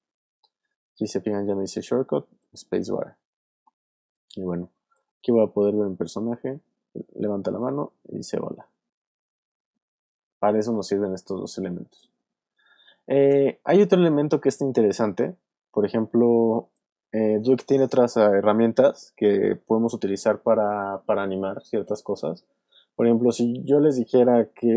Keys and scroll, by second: 5.1 space, 13.3 space, 14.2 alt+space, 16.0 v.